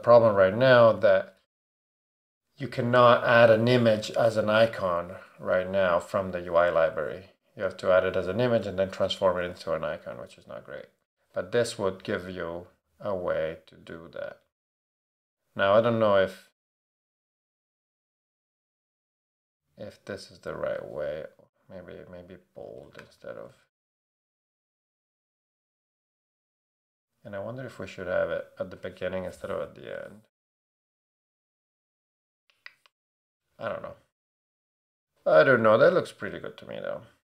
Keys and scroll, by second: 14.2 Up, 19.5 Right, 22.5 BackSpace, 23.0 shift+8, 23.7 shift+Right, 24.8 shift+Right, 24.8 shift+Down, 25.1 shift+BackSpace, 25.4 shift+8, 34.8 super+a.